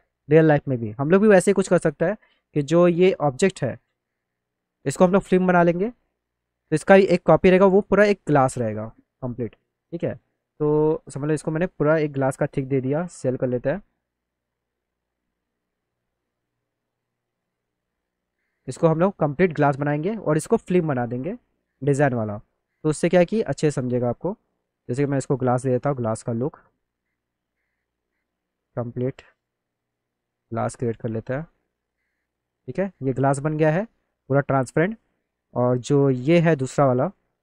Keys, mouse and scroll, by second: 0.8 middle click, 1.1 middle click, 1.3 middle click, 2.0 middle click, 2.8 middle click, 3.6 alt+middle click, 3.9 middle click, 4.6 click, 5.7 alt+middle click, 7.1 shift+click, 8.5 click, 9.5 click, 11.0 click, 11.5 click, 12.9 s, 13.7 s, 15.4 click, 17.0 click, 19.2 click, 20.1 click, 20.6 alt+middle click, 21.4 middle click, 21.8 click, 22.3 alt+middle click, 24.9 click, 25.8 click, 26.9 click, 28.0 click, 28.7 click, 29.7-30.7 drag, 31.6 click, 33.3-35.1 alt+middle drag, 35.2 alt+middle click, 35.4 click, 35.8 middle click, 36.1 alt+middle click, 36.7 middle click.